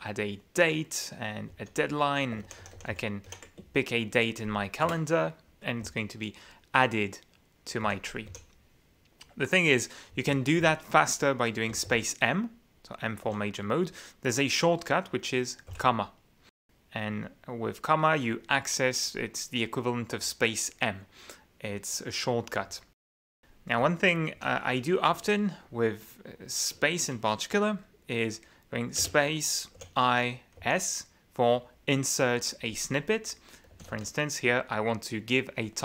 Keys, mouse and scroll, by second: 1.5 d, 2.5 shift+Right, 2.9 shift+Down, 3.3 shift+Left, 4.9 Return, 5.8 j, 7.8 u, 8.3 k, 10.1 k, 10.6 j, 11.8 space, 11.9 m, 13.3 q, 15.7 ,, 22.7 q, 23.8 k, 24.4 j, 29.0 space, 29.8 i, 30.6 s, 33.5-34.7 typing.